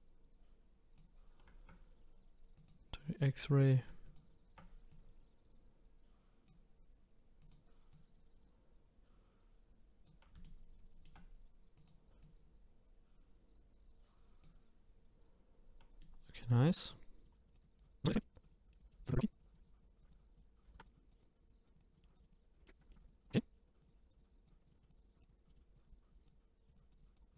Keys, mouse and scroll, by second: 2.5 click, 4.0 shift+click, 4.9 click, 7.4 click, 7.9-10.4 drag, 10.4-11.7 shift+middle drag, 11.7 click, 12.2 click, 16.0 middle click, 16.2-17.3 middle drag, 17.5 click, 17.8 click, 18.0 click, 18.1 middle click, 18.3 click, 18.4 click, 18.5 middle click, 18.8 middle click, 19.0 click, 19.0 click, 19.4 middle click, 19.5 click, 20.1 shift+click, 20.4 middle click, 20.7 ctrl+z, 22.0 middle click, 22.3 click, 22.6 middle click, 22.8 scroll up 2, 22.9 shift+middle click, 23.0 click, 23.8 click, 24.7 middle click, 25.2 click, 25.5 middle click, 25.8 click, 26.2 click, 26.3 click, 26.9 click, 27.2 scroll down 2, 27.2 scroll up 2.